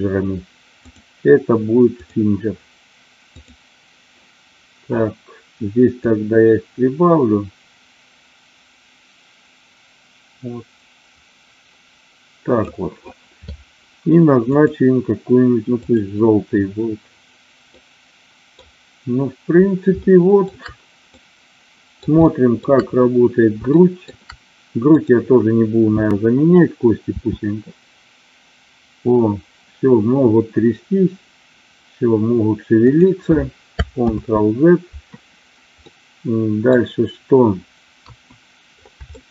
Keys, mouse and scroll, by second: 0.8-2.2 drag, 3.7 drag, 5.9-12.4 drag, 14.6 click, 17.8 middle click, 20.1 shift+middle click, 21.2 middle click, 22.3 shift+middle click, 23.7 shift+middle click, 25.0-26.1 drag, 27.2 r, 32.8 click, 34.0 ctrl+z, 36.0 middle click, 37.9 KP_1, 39.0-39.3 shift+middle drag.